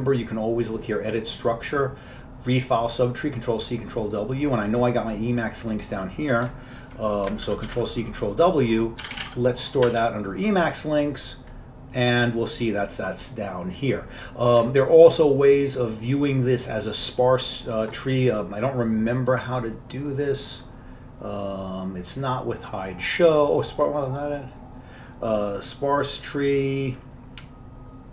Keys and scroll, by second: 7.6 ctrl+c, 7.8 ctrl+w, 8.9-10.3 typing, 10.0 Return.